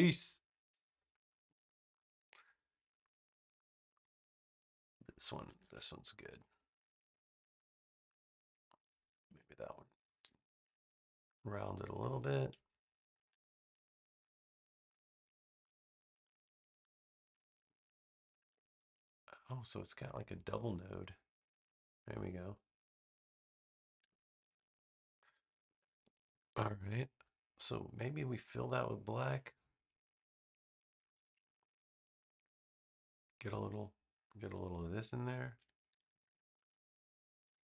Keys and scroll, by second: 5.5 super+z, 19.9 BackSpace, 24.3 super+z, 35.8 super+c, 36.1 super+v, 37.3 v.